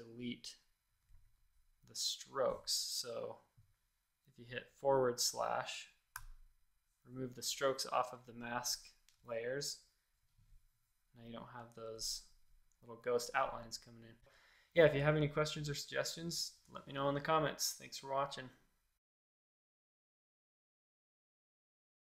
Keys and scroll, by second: 2.9 x, 6.1 /, 14.1 space.